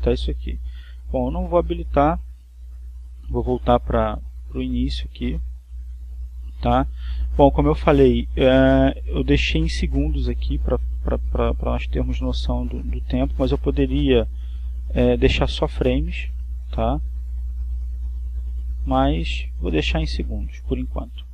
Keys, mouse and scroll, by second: 3.9-14.5 drag, 15.3 click, 16.6 click, 20.5 click.